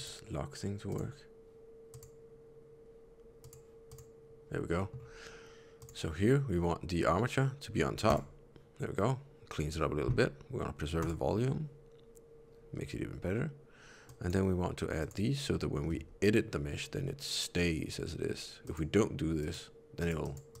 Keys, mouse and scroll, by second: 1.9 click, 3.8 click, 4.7 middle click, 5.7 click, 8.0 click, 10.9 click, 14.9 click, 15.8 Tab, 18.5 click, 19.3 click, 19.9 click, 20.1 click, 20.4 click.